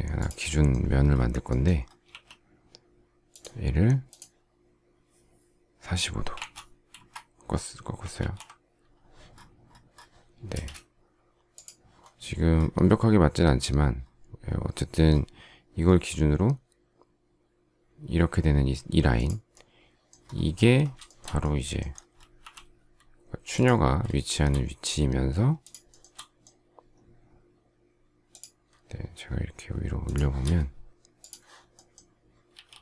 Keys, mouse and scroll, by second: 2.0 q, 6.0-6.8 typing, 6.8 Return, 8.1 alt+t, 10.4 space, 21.0 shift+middle click, 22.3 m, 25.6 shift+click, 25.8 shift+middle click, 29.9 shift+click, 32.4 s.